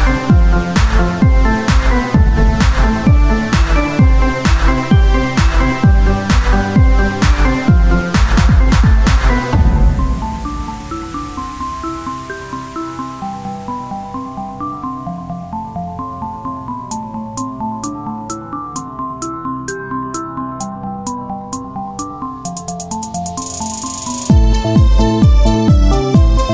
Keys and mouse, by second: 2.0-3.5 drag, 3.1 Tab, 3.5 z, 3.9 z, 7.6 Tab, 8.2 ctrl+Tab, 9.6-14.9 drag, 14.9 KP_3, 15.2 z, 15.4 c, 16.6-17.7 drag, 16.9 z, 17.7 e, 20.6 z, 21.1 z, 21.7 s, 23.1 Tab, 24.1 Tab, 24.7 s, 25.7 Tab.